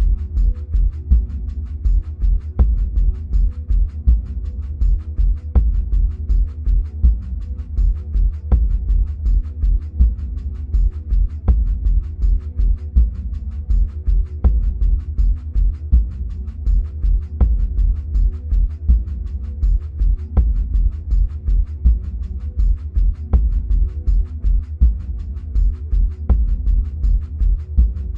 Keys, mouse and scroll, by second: 3.3 s, 6.0-12.3 middle drag, 12.3 click, 13.4-17.2 middle drag, 15.8 ctrl+a, 17.2-28.1 drag, 22.6 ctrl+space.